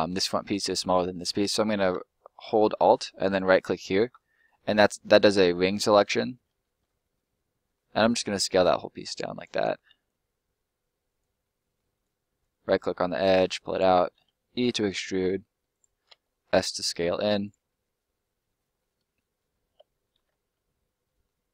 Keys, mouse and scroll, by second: 3.2 alt+right click, 3.9 alt+middle click, 8.0 s, 9.3 click, 11.4 middle click, 11.9 right click, 13.3 click, 14.2 e, 15.7 click, 16.1 s, 17.3 click, 17.6 middle click, 19.2 right click, 19.7 ctrl+right click, 20.1 ctrl+l, 21.0 middle click.